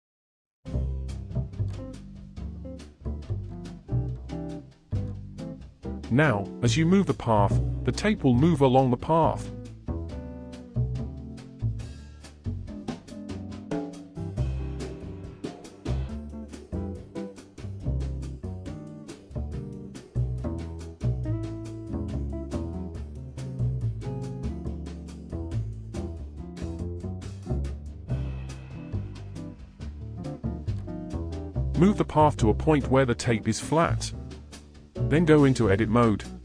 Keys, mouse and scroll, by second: 0.8 click, 2.4 g, 8.1 ctrl+z, 8.6-9.1 scroll down 3, 9.2-11.2 shift+middle drag, 11.2 g, 18.7 ctrl+z, 19.4 scroll up 4, 20.0-20.3 scroll down 3, 20.3-20.7 scroll up 4, 20.7-21.7 scroll down 3, 21.7-24.7 shift+middle drag, 27.9-29.4 drag, 29.4-29.8 scroll down 2, 29.8-31.2 shift+middle drag, 31.2 Tab, 33.1 g.